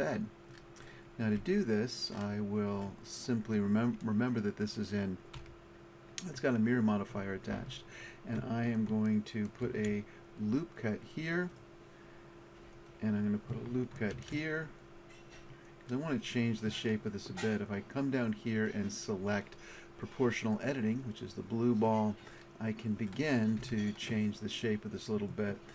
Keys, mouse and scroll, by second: 1.4 Tab, 5.4 a, 9.6 ctrl+r, 14.1 ctrl+r, 16.5-18.5 drag, 20.0-21.5 drag, 22.0 middle click, 23.6 a, 24.6-25.7 middle drag.